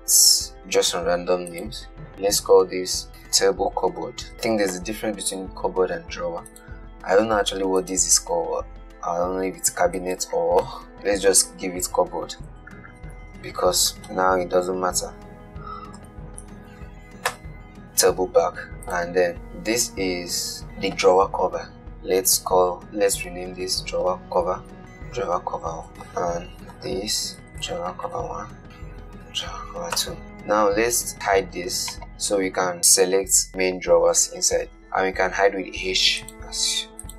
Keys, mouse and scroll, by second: 1.8 click, 3.1 F2, 6.7 click, 8.1 click, 10.2 click, 11.0 F2, 19.1 click, 24.6 F2, 24.8 BackSpace, 25.9 click, 26.5 F2, 28.6 F2, 32.0 click, 35.9 h, 36.5 click, 36.8 h.